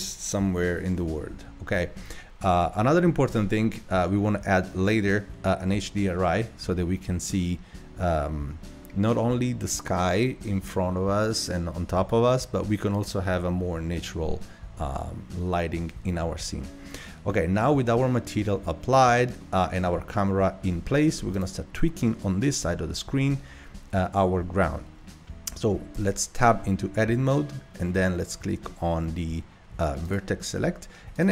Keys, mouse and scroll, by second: 19.4-20.3 middle drag, 20.3 scroll down 1, 20.8-21.3 shift+middle drag, 21.3 click, 26.0 Tab, 30.1 click, 31.2 click.